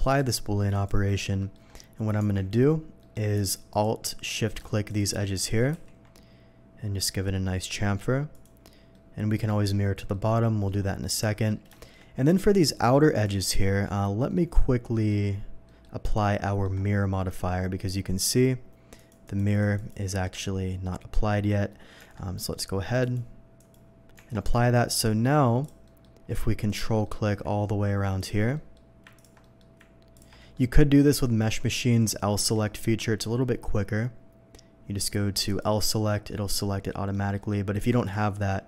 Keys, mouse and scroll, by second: 0.0 click, 0.7 click, 1.4 middle click, 2.2 Tab, 3.0 Tab, 3.0 middle click, 3.7 alt+click, 4.9 alt+shift+click, 5.7 ctrl+b, 6.7 scroll up 1, 7.0-7.4 scroll down 2, 8.3 click, 8.6 scroll down 1, 8.9 middle click, 10.1 middle click, 11.1 middle click, 11.7 shift+middle click, 13.1 shift+click, 14.3 shift+middle click, 14.9 middle click, 15.6 middle click, 16.4 middle click, 16.8 scroll up 2, 18.9 click, 19.2 click, 19.5 click, 19.7 click, 21.3 scroll up 1, 21.9 scroll down 1, 23.0 Tab, 23.0 click, 23.5 click, 25.6 click, 25.8 middle click, 26.7 ctrl+click, 27.0 ctrl+middle click, 28.2 ctrl+click, 28.5 ctrl+middle click, 29.1 ctrl+click, 29.4 ctrl+middle click, 30.1 ctrl+click, 30.4 ctrl+middle click, 31.4 ctrl+click, 32.4 y, 35.5 click, 36.0 middle click, 36.9 middle click, 37.3 middle click, 38.0 click.